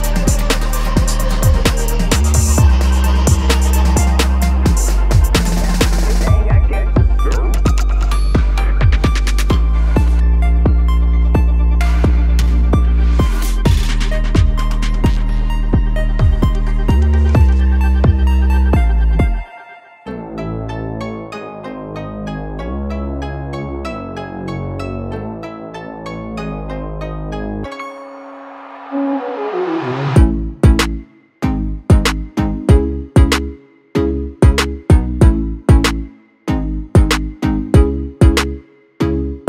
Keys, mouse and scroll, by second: 0.6-1.2 middle drag, 1.2 scroll, 3.0 click, 3.7 g, 6.2 scroll, 6.8-10.1 middle drag, 10.1-12.0 drag, 12.0 g, 15.3 click, 18.8 1, 19.9-23.5 middle drag, 23.5 click, 24.1-25.7 middle drag, 25.7 click, 26.5 g, 33.4-38.4 drag.